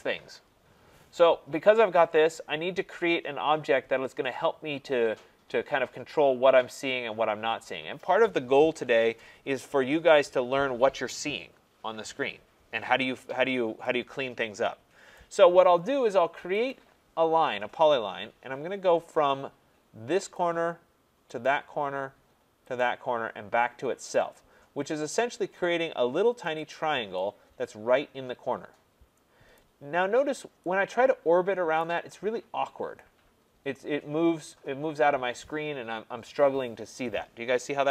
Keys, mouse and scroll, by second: 15.1 right click, 16.7 click, 20.3 click, 21.4 click, 22.7 click, 24.1 click, 25.2 click, 29.5 right click, 30.1 middle click, 31.8 right click, 32.2 middle click, 35.1 scroll.